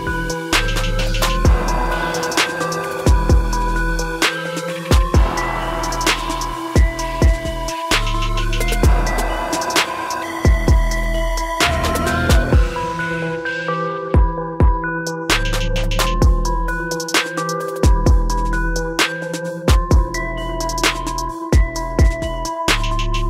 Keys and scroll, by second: 2.5 ctrl+shift+i.